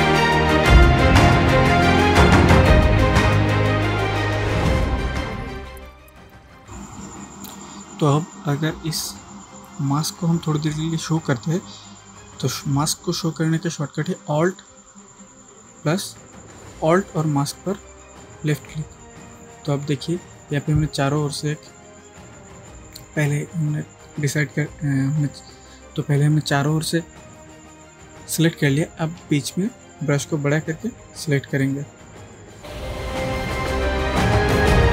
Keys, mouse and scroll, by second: 0.0 click, 1.0 shift+click, 1.0-4.1 typing, 1.3 shift+click, 1.6 shift+click, 1.8 click, 2.9 click, 3.1 shift+click, 3.6 click, 4.8 click, 5.4 ctrl+space, 5.8 click, 5.9 ctrl+click, 6.0 ctrl+space, 6.5 space, 6.6 click, 6.7-7.8 space, 18.6 alt+click, 29.7 alt+click, 29.9-30.9 alt+right drag, 31.7-32.3 click, 32.7 click.